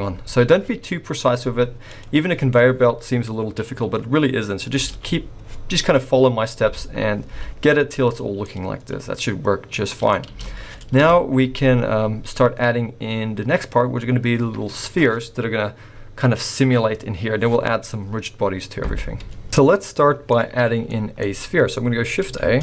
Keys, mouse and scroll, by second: 1.9 click, 4.9 alt+a, 8.2 scroll down 1, 8.4 middle click, 10.3 space, 11.0 KP_0, 13.4-14.1 scroll up 1, 14.1-16.5 scroll up 1, 19.5 middle click, 20.3 scroll down 1, 20.9 middle click, 21.3-22.0 scroll up 1, 22.0-22.4 scroll up 2, 22.4 shift+a.